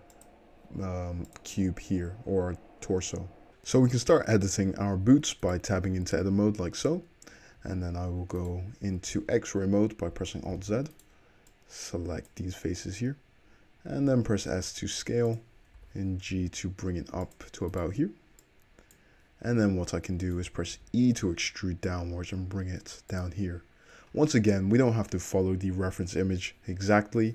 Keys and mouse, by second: 3.5-5.5 shift+middle drag, 5.5 click, 5.6-8.4 middle drag, 5.9 Tab, 7.6 1, 8.4 click, 8.5-10.2 middle drag, 10.2 alt+click, 10.6 alt+z, 10.7 middle click, 11.7-15.5 drag, 14.1 s, 15.5-17.7 middle drag, 15.8 g, 17.7 click, 17.8 middle click, 18.5-23.3 drag, 19.5 `, 20.8 e, 23.3-27.3 middle drag.